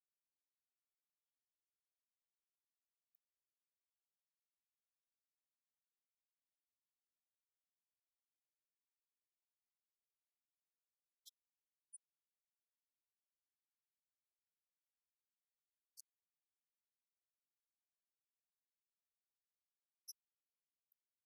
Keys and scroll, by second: 0.3 Up, 6.2 ctrl+shift+Right, 7.4 ctrl+shift+Down.